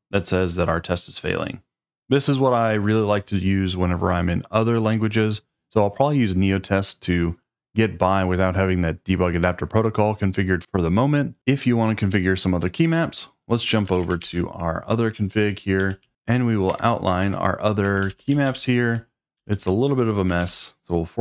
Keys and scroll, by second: 13.8 ctrl+a, 14.2-16.5 typing, 16.7 Return, 17.2 Escape, 17.6-21.2 typing.